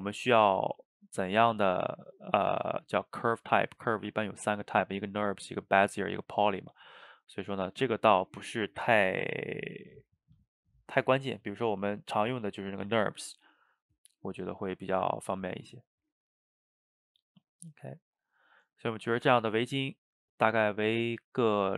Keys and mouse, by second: 6.6 click, 10.3 click, 17.6-20.6 middle drag.